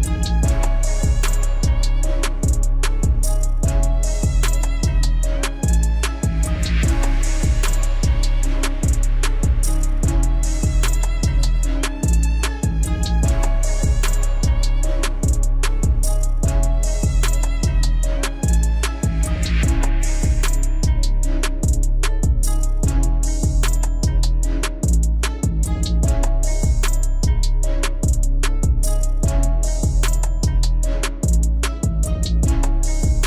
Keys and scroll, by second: 29.7 ctrl+s.